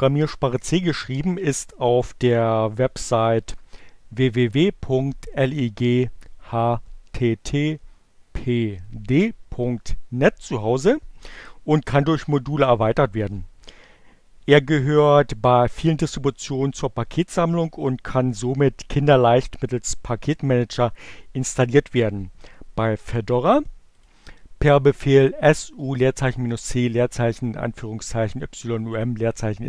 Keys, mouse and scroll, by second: 23.7 click.